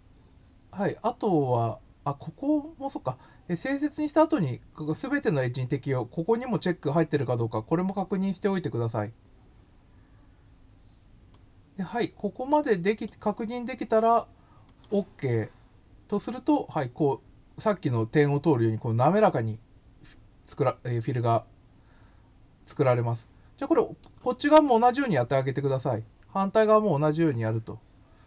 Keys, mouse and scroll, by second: 11.3-13.0 drag, 14.6 click, 16.4-19.6 middle drag.